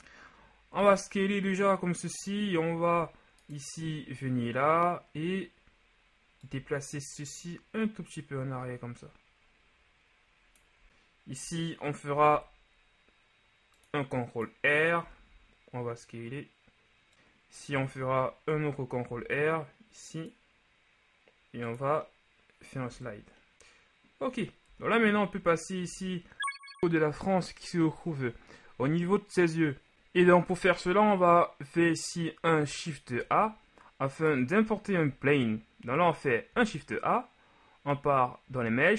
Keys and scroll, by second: 0.7 Tab, 12.1 ctrl+r, 15.1 s, 18.0 Tab, 19.1 r, 23.0 Tab, 24.7-25.9 typing, 35.2 a, 36.6 shift+a.